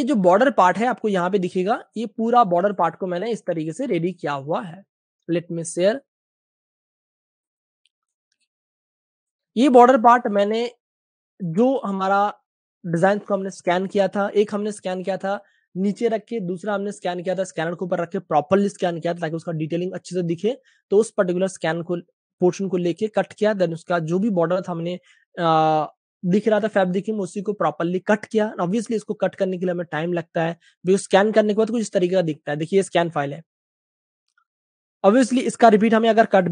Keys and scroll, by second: 1.5-3.5 typing, 9.5 v, 10.0 space, 11.6 space, 11.6 space, 24.3-24.7 typing, 32.2 space, 33.8 typing.